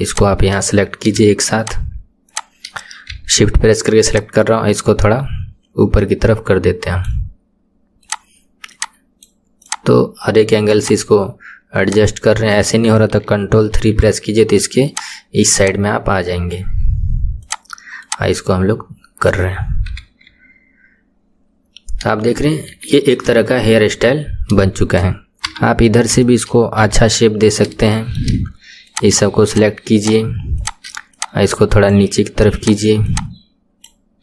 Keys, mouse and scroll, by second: 0.1 shift+click, 1.6 shift+click, 2.3 shift+click, 3.1 KP_1, 4.1 click, 8.1 click, 8.7 click, 9.6 click, 10.8 click, 11.9 click, 13.8 ctrl+KP_3, 14.9 click, 15.6 click, 17.5 click, 18.1 click, 19.9 KP_1, 20.3 Tab, 21.5-22.5 scroll down 3, 22.5-22.9 scroll down 2, 22.9-24.3 shift+middle drag, 24.3 scroll down 1, 25.5 KP_3, 25.9-26.3 scroll up 3, 26.3-26.9 shift+middle drag, 26.9 Tab, 27.5-27.9 scroll up 2, 27.9-28.9 shift+middle drag, 28.9 click, 29.5 shift+click, 30.0 shift+click, 30.6 shift+click, 31.2 click, 32.6 click, 33.1 click.